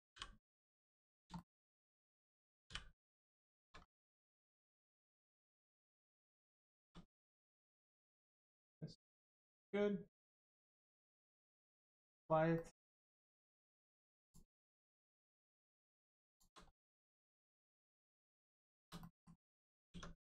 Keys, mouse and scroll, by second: 0.1 h, 0.6 click, 1.3 shift+middle click, 2.6 middle click, 3.4 shift+middle click, 3.7-4.2 scroll down 1, 4.2 middle click, 6.7 shift+middle click, 7.7 middle click, 8.3 scroll up 1, 10.1 click, 10.7 middle click, 11.0 scroll up 1, 11.3 middle click, 12.1-12.5 scroll down 1, 12.5 middle click, 12.9 scroll up 1, 13.3 Tab, 13.5 middle click, 14.2 click, 14.5 shift+middle click, 15.1 middle click, 15.2 middle click, 16.3 shift+click, 16.7 middle click, 18.5 shift+click, 18.9 middle click, 19.0 middle click, 19.4 scroll down 1, 19.6 middle click, 19.9 Tab, 20.1 click.